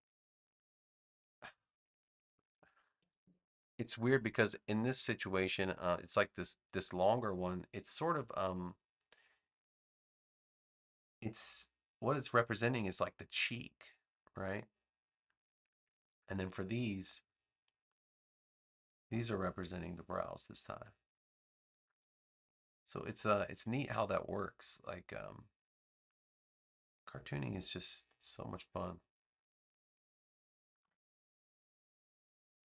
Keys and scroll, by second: 3.0 super+=, 4.0 space, 30.7 a.